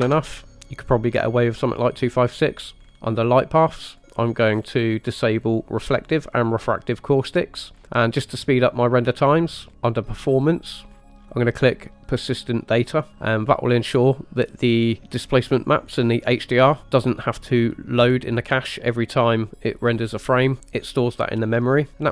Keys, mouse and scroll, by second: 2.8 click, 2.8 scroll up 4, 2.9 scroll down 3, 4.0 click, 4.6-5.1 scroll down 2, 6.2 click, 6.9 click, 9.7-10.5 scroll down 2, 10.5 click, 11.0-11.3 scroll down 4, 12.4 click.